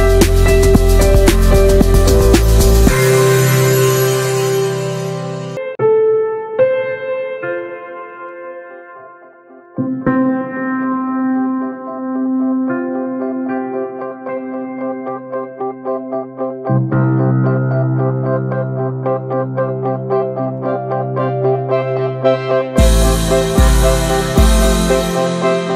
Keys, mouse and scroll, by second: 0.2 middle click, 0.7 scroll down 1, 0.8 alt+z, 1.0-1.4 shift+middle drag, 1.4 click, 2.3 shift+middle click, 2.8 ctrl+z, 3.5 middle click, 4.2 click, 4.4-4.7 middle drag, 4.7 click, 5.0 Tab, 5.2 middle click, 5.4 alt+z, 5.5-6.3 middle drag, 6.3-7.0 drag, 7.0 middle click, 7.7 3, 8.1 click, 8.3 shift+middle click, 8.5 alt+z, 9.3 z, 9.7 alt+middle click, 10.4 alt+z, 10.6 shift+middle drag, 10.8 scroll up 1, 11.0 alt+z, 14.5-16.0 drag, 16.0 alt+z, 16.5-17.5 drag, 17.5 alt+z, 17.7 middle click, 17.9 scroll down 3, 18.1 middle click, 18.3 scroll up 2, 18.5 shift+middle click, 19.0 scroll up 1, 19.1 middle click, 19.4 2, 19.8-20.2 drag, 20.2-20.7 middle drag, 20.7 click, 21.5 scroll down 3, 21.6 shift+middle click, 22.1 ctrl+s, 22.2 scroll up 2, 22.3 shift+middle click, 22.6 scroll down 1, 22.9 ctrl+s, 23.1 shift+middle click, 23.2-23.7 scroll up 2, 23.7 click, 24.5 scroll down 1, 24.7 ctrl+z, 25.5 shift+middle click.